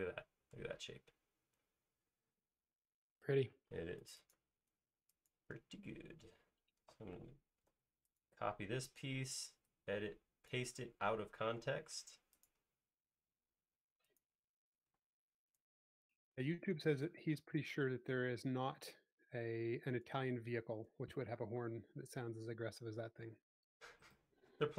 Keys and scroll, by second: 7.8 super+c, 11.8 l, 14.9 p, 16.9 Escape, 20.8 space, 22.5 space.